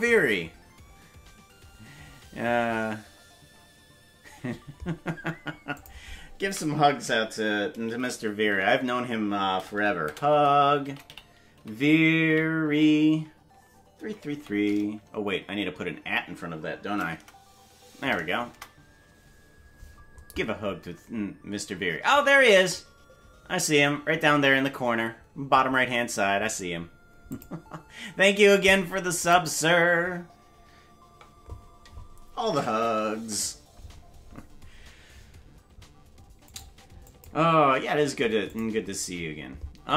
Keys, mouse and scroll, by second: 36.5 click, 37.1 click, 38.5 click.